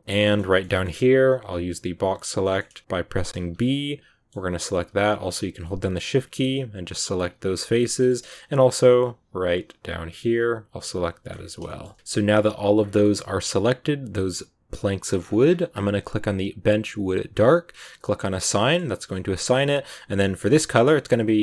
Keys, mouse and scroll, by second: 0.0 middle click, 0.4 scroll down 1, 0.4 shift+middle click, 1.0-1.3 scroll up 1, 1.3 b, 2.3 middle click, 2.6 b, 3.5 middle click, 5.0 shift+right click, 5.3 shift+right click, 5.6 shift+right click, 6.6 shift+right click, 6.9 shift+right click, 7.5 middle click, 8.3 shift+right click, 9.6 shift+right click, 10.5 shift+right click, 10.8 middle click, 11.3 scroll down 2, 11.6-12.7 shift+middle drag, 12.7 scroll down 2, 12.8 middle click, 13.0 g, 14.9 scroll down 1, 15.0-15.5 scroll up 10, 16.2 click, 18.0 click, 18.4-19.4 middle drag, 19.4-21.4 drag.